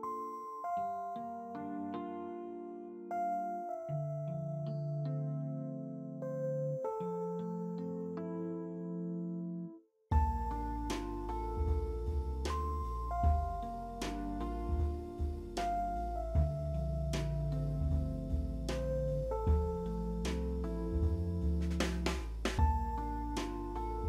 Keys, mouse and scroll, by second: 0.1 shift+click, 1.3 alt+middle click, 1.8 alt+middle click, 2.2 alt+middle click, 2.4 alt+middle click, 3.0 alt+middle click, 3.9-4.3 alt+scroll up 3, 4.3 F4, 8.1 scroll down 2, 9.4-11.9 typing, 9.8 Return, 10.2 middle click, 11.5 Return, 13.5 alt+w, 14.2 p, 14.7 alt+middle click, 15.4 scroll up 1, 15.5 z, 15.9 w, 20.4 middle click, 20.6 e, 21.5 right click, 21.9 middle click, 22.1 alt+w, 24.0 -.